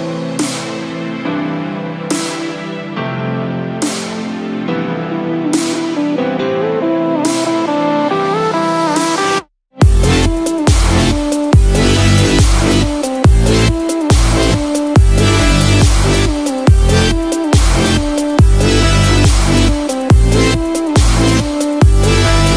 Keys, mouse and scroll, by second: 0.8-1.2 scroll down 1, 2.4 scroll down 5, 2.7-3.1 scroll down 1, 5.7 click, 16.0-17.1 scroll down 1, 17.1-18.9 scroll up 1, 18.9 click.